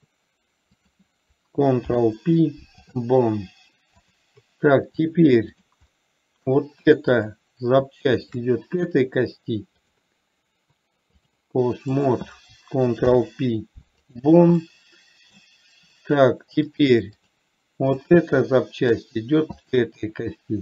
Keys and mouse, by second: 1.1 click, 2.1 ctrl+p, 4.4 click, 5.4 click, 6.2-6.7 middle drag, 10.1-11.6 drag, 12.2 click, 13.4 ctrl+p, 15.1-15.7 middle drag, 17.0 click, 18.2 drag, 18.9 middle click, 20.0 shift+drag.